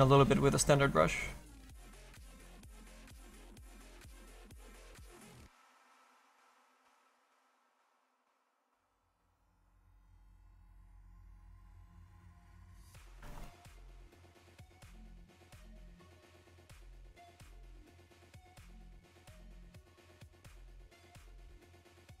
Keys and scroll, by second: 10.0 s.